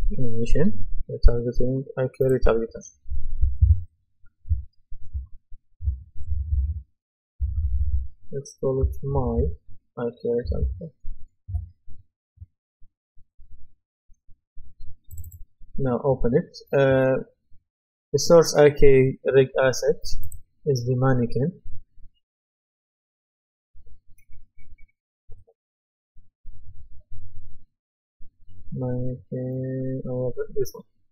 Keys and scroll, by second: 6.2 Right, 7.4 BackSpace, 8.8-9.8 typing.